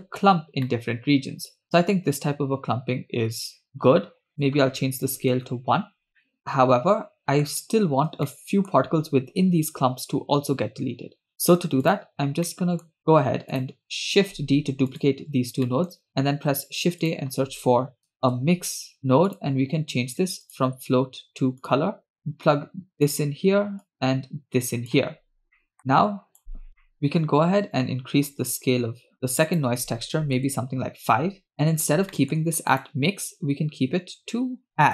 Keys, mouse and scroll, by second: 0.3-0.7 scroll down 3, 0.7-3.8 middle drag, 4.3-5.3 drag, 6.2-7.4 middle drag, 7.8-8.2 scroll up 1, 8.3-8.7 shift+middle drag, 11.0-11.5 scroll down 2, 11.8 click, 12.5 middle click, 13.0 drag, 13.5 shift+click, 14.4 shift+d, 15.7 middle click, 16.1 shift+a, 19.8-20.4 scroll up 1, 20.4 scroll up 1, 20.5-21.8 drag, 22.2-23.1 drag, 23.8-24.9 drag, 25.4 scroll down 3, 25.5 middle click, 25.5 scroll up 1, 25.8-26.4 drag, 26.4 scroll up 2, 26.8 middle click, 28.3 click, 29.5 click, 31.5 middle click, 31.7-32.2 scroll up 2, 32.2 middle click, 32.7-34.9 drag.